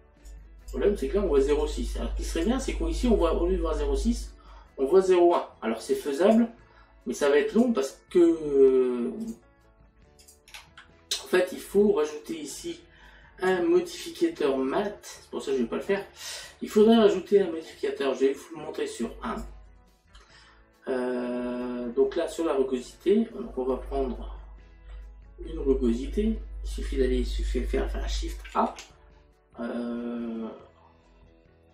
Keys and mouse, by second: 0.3 click, 1.7 click, 5.4 click, 7.6 click, 9.3 click, 16.5 middle click, 18.4 click, 24.3 middle click, 26.3 middle click.